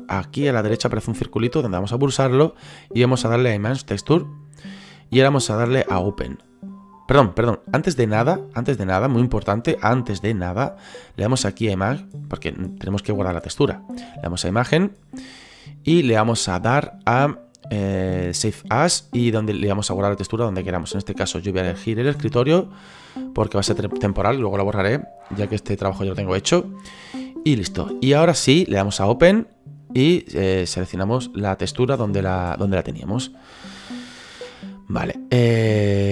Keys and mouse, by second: 1.5 click, 4.0 click, 14.6 click, 18.6 click, 21.0 click, 22.8 click, 29.1 click, 31.0 click, 32.4 click, 35.2 right click.